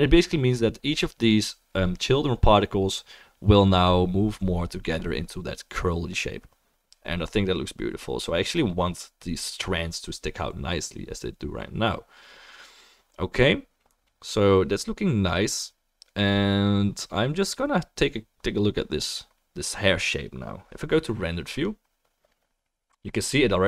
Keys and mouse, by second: 7.2-21.8 drag, 7.2-23.2 middle drag, 7.2-23.6 right drag.